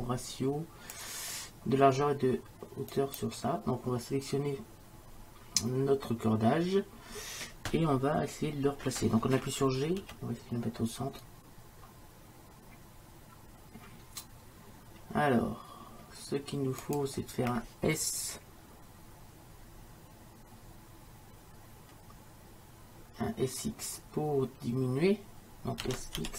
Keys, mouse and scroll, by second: 3.6-10.0 right drag, 10.0 g, 25.9 s.